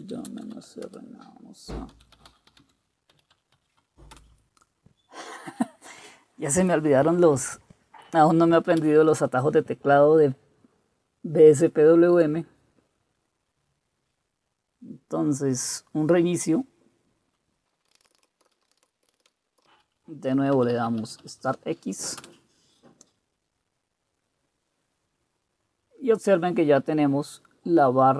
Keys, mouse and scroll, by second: 0.0-4.4 typing, 8.8 Return, 17.7-21.8 typing, 22.3 Return.